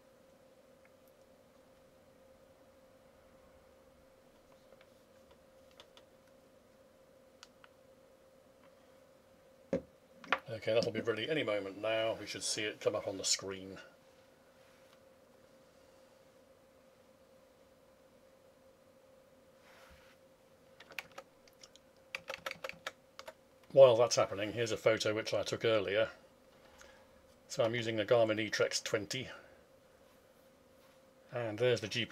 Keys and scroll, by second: 21.0 alt+Tab.